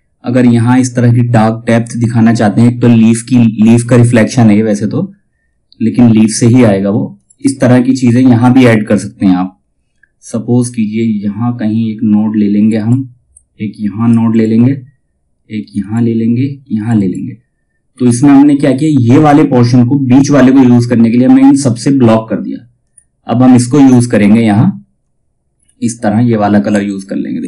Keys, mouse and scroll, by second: 6.0-6.7 scroll up 1, 6.7 click, 6.9 space, 12.1 click, 17.4 scroll up 1, 22.3 click, 23.0 scroll down 1, 24.1 ctrl+scroll down 1, 26.2 F2, 26.5 click.